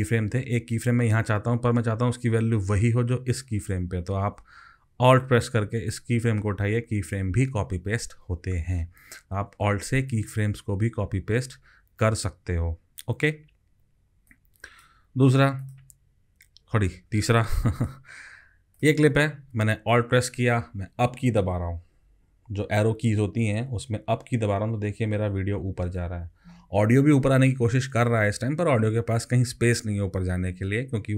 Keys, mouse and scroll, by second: 5.9 alt+click, 25.0 alt+Up.